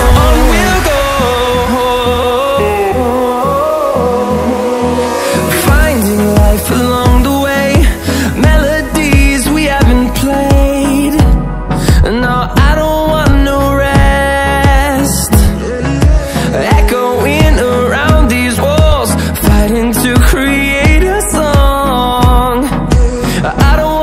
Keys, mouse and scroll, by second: 10.4 ctrl+w, 12.3 click, 22.4 click.